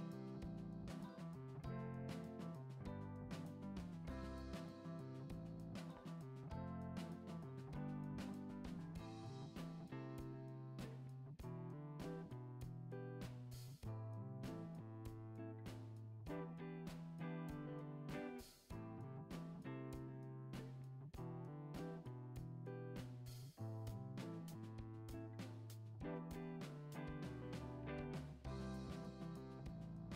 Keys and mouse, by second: 1.3-1.6 middle drag, 1.9-2.3 shift+middle drag, 2.5-2.9 middle drag, 3.4-3.7 shift+middle drag, 4.2 Tab, 5.7 shift+middle drag, 6.3 middle click, 6.7 e, 9.7 ctrl+r, 11.4 ctrl+b, 13.2 click, 14.0 click, 15.1 shift+click, 15.5 middle click, 15.8 e, 16.8 s, 18.6 g, 20.3 ctrl+Tab, 21.0 click, 21.4-21.8 middle drag, 21.9 shift+middle drag, 24.6 middle click, 25.0 click, 26.0 Tab, 27.2 middle click, 27.5 alt+z, 28.1 click, 28.7 alt+z, 29.2 g.